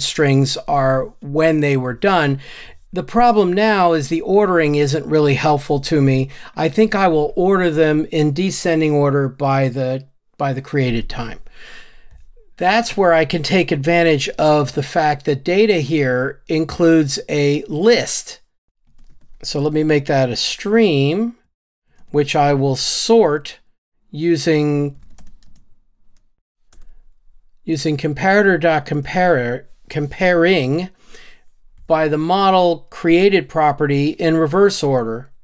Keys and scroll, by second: 19.7 Return, 22.0 Return, 26.9 Return, 29.1 Tab.